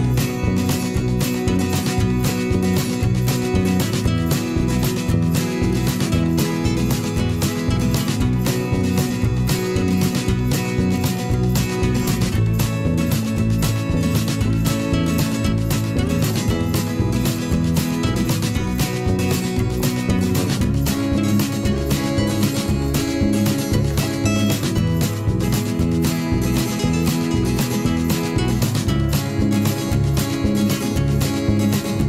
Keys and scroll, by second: 1.6 alt+Right, 2.4 alt+Right, 4.9 v, 6.3 ctrl+z, 8.1 ctrl+shift+., 9.1 shift+Left, 10.4 ctrl+shift+., 11.3 Right, 11.6 Left, 15.9 shift+Left, 16.7 Right, 17.5 ctrl+shift+., 18.8 alt+Right, 19.7 Left, 22.1 Right.